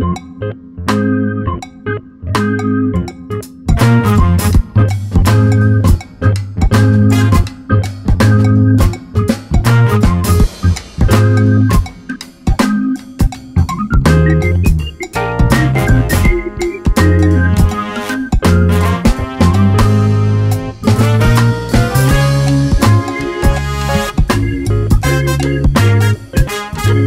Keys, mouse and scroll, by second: 3.7 click, 5.0 click, 5.5 click, 7.3-8.8 drag, 9.2 scroll down 2, 9.4-10.6 scroll up 2, 10.6-13.1 drag, 11.8-12.3 scroll down 1, 13.6-14.2 drag, 14.6 Delete, 15.6 ctrl+shift+click, 18.0-22.4 drag, 25.7 scroll down 1, 25.9 alt+a, 26.2-26.6 scroll up 1, 26.6-26.9 scroll down 1.